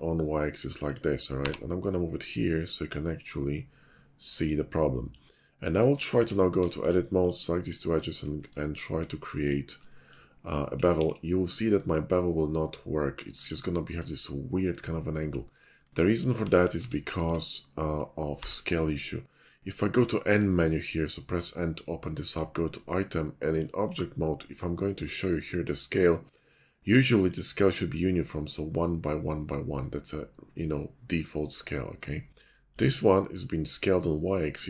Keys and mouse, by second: 1.3 g, 1.8-4.9 drag, 4.9 middle drag, 5.1 drag, 5.8-7.7 middle drag, 6.1 Tab, 8.2 shift+middle click, 8.5 click, 8.5 right click, 8.6 middle click, 9.4 shift+click, 11.0 ctrl+b, 13.4 click, 15.5 middle click, 16.1 middle click, 16.4 ctrl+z, 16.7 Tab, 17.0 shift+middle click, 18.3 n, 22.3 middle click, 29.3-34.6 drag.